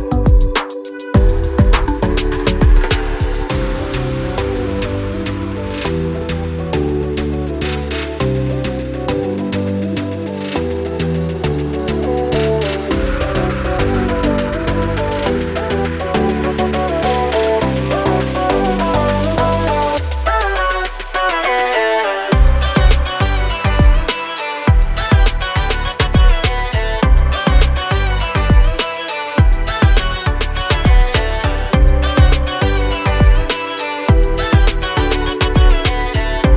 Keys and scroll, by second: 0.1 r, 2.3 r, 3.8-6.1 typing, 8.8 r, 11.2 p, 12.0 space, 15.3 r, 17.2 p, 17.9 space, 20.9 r, 23.0 p, 23.9 space, 31.6 m, 32.1 Up, 32.7 space.